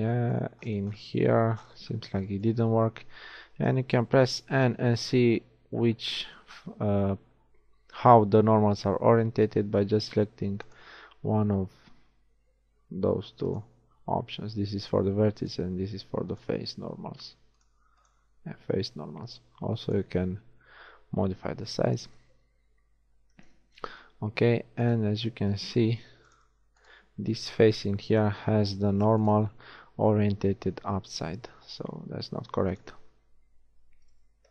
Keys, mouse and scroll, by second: 1.4 Tab, 3.8 n, 10.8-13.7 drag, 15.6-22.4 drag, 25.0 shift+click, 25.8 ctrl+Tab, 28.4 g, 29.7 z, 30.5 z, 34.0 click, 34.3 n.